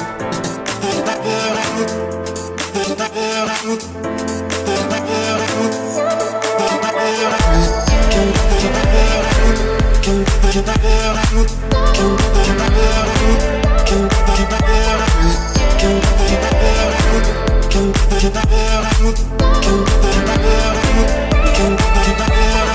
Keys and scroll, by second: 4.8 Return, 7.2 Escape, 15.8 Escape, 21.6 Escape.